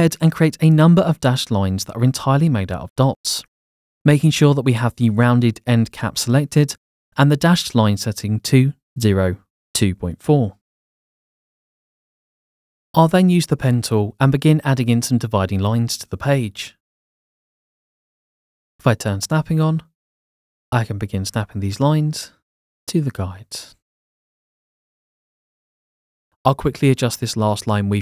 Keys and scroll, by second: 8.1-10.6 typing, 16.5 Escape, 18.8 Escape, 23.7 Escape, 25.4 Escape.